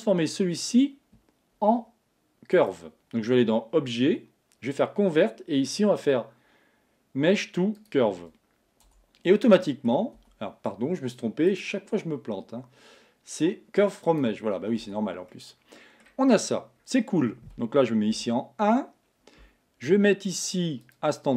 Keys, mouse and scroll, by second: 2.6-5.6 drag, 9.1 Tab, 9.6 middle click, 10.2 Tab, 11.6-14.6 drag, 15.0 Tab, 15.4 middle click, 16.4 scroll down 2, 16.8 scroll up 2, 17.0-18.1 scroll down 1, 18.1 KP_1, 20.9 click.